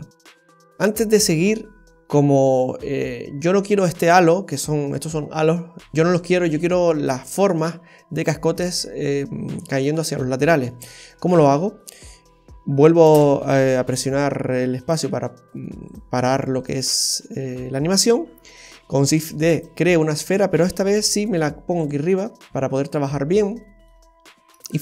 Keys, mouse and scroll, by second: 10.6-11.3 scroll down 2, 11.3 scroll down 1, 11.3 shift+middle click, 13.0 space, 14.8 click, 15.8 click, 16.6 click, 19.2 shift+d, 22.1-22.4 scroll up 1, 22.5 shift+middle click, 23.0-23.5 scroll up 2, 23.5 shift+middle click, 24.0-24.5 scroll up 2, 24.6 shift+middle click.